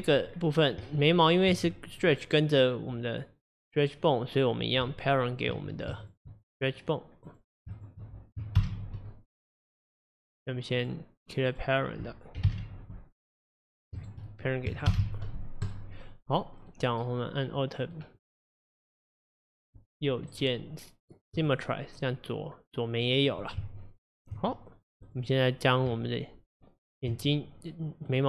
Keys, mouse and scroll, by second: 0.0 Tab, 0.3-0.9 scroll down 4, 0.9 Tab, 1.8 middle click, 2.1 scroll down 2, 3.1-4.4 scroll down 4, 4.9 Tab, 6.1 shift+click, 7.3 click, 7.8 shift+click, 8.6 ctrl+p, 10.8 click, 11.5 click, 12.5 alt+p, 14.0 click, 14.9 ctrl+p, 16.5-18.2 middle drag, 18.2 click, 19.1 click, 20.4-22.1 right drag, 22.1-23.7 middle drag, 24.4 Tab, 24.8 scroll up 1, 25.1 click, 25.9 Tab, 28.1 click.